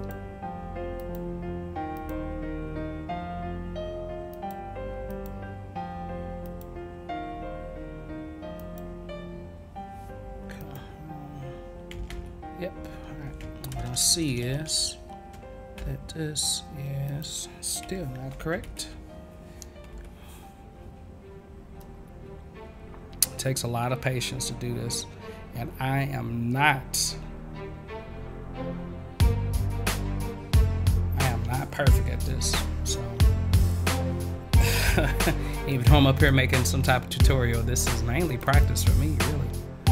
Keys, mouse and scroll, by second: 0.9 click, 1.9 click, 4.3 click, 5.1 click, 6.4 click, 8.5 click, 10.6 click, 12.1 ctrl+z, 15.8 v, 17.0 click, 23.1-30.2 drag, 34.9 a, 36.2 click, 38.3 click, 38.4 click, 39.3 click.